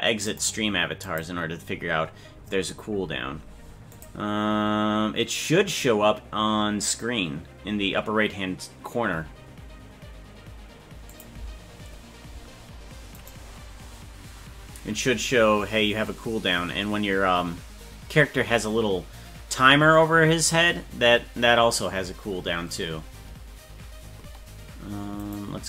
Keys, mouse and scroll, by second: 13.2 right click, 25.2 right click.